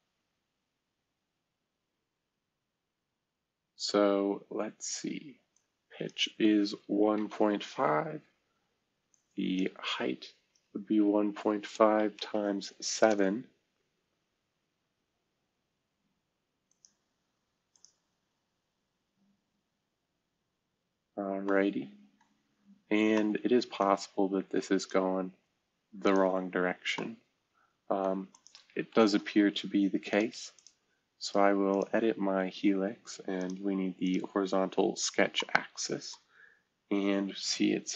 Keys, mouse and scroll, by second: 1.0-1.8 scroll up 2, 5.5 right click, 5.6 click, 6.9-7.3 typing, 7.7 Tab, 9.8-12.3 typing, 13.0 Return, 16.7-17.6 drag, 22.2 middle click, 22.3-22.8 scroll down 2, 22.8-23.8 scroll up 2, 24.7 click, 25.2 space, 26.0 click, 26.5-26.9 scroll up 2, 28.9 ctrl+s, 34.8-35.3 scroll down 2, 35.3-37.1 middle drag, 35.4-37.1 scroll up 4.